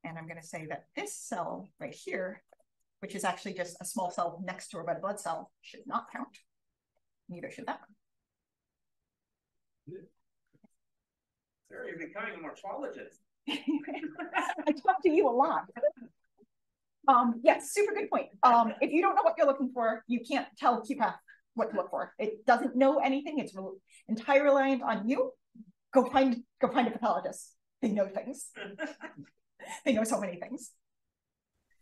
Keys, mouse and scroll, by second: 0.4 click, 1.1 d, 1.8 drag, 2.1 d, 5.1 d, 5.6 d, 6.7-10.2 typing, 7.2 click, 10.0 click, 11.1 click, 11.3 d, 31.1 d.